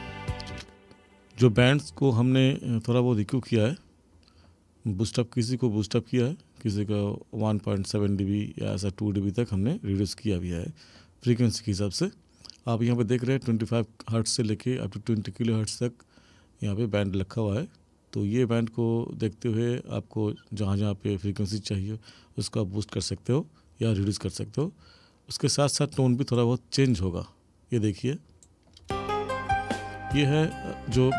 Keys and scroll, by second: 0.6 space, 28.8 space.